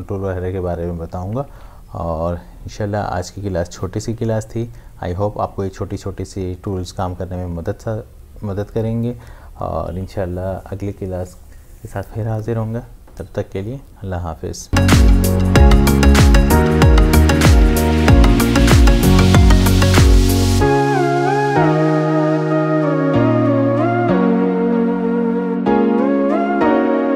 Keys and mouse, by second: 1.4 ctrl+Tab.